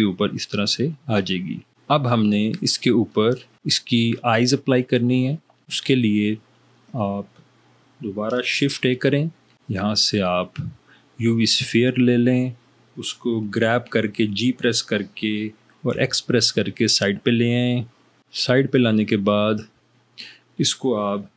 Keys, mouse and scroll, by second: 8.8 shift+a, 13.8 g, 15.9 x.